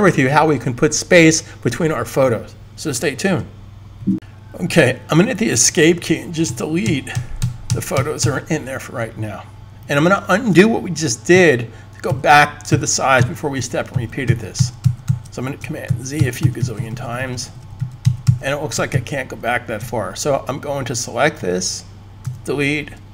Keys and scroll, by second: 6.3 Escape, 6.5 Escape, 6.9 Escape, 7.3 Escape, 7.5 Escape, 7.7 Escape, 8.0 Escape, 11.2 super+z, 12.0 super+z, 12.6 super+z, 12.9 super+z, 13.8 super+z, 14.0 super+z, 14.3 super+z, 14.8 super+z, 15.6 super+z, 15.6 super+z, 15.9 super+z, 16.3 super+z, 16.5 super+z, 16.8 super+z, 17.1-17.5 super+z, 17.8 super+z, 18.1 super+z, 18.8 super+z, 22.2 super+z.